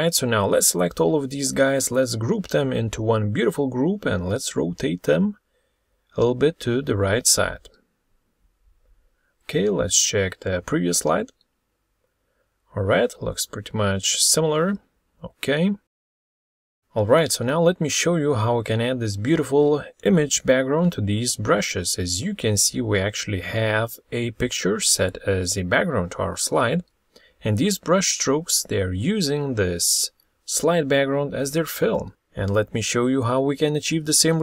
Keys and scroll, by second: 1.5 ctrl+g, 3.3 alt+Right, 15.9 ctrl+z, 28.7 ctrl+z.